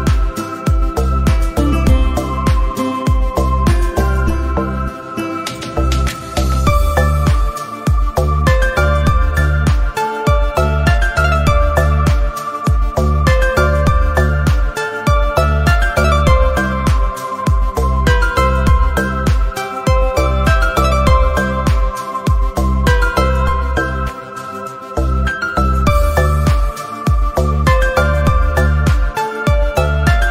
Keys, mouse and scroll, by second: 0.2-0.9 scroll down 2, 0.9-2.3 scroll down 1, 2.3-4.3 scroll down 1, 3.7 middle click, 4.3 middle click, 4.6 a, 5.2 middle drag, 5.4 scroll down 1, 5.5 middle click, 5.8 Tab.